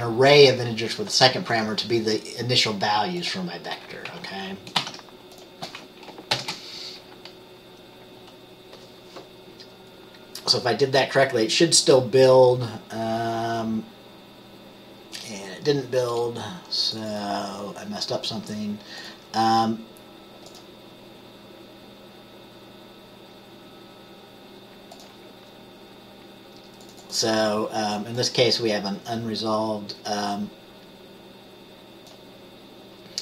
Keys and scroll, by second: 4.9 ctrl+s.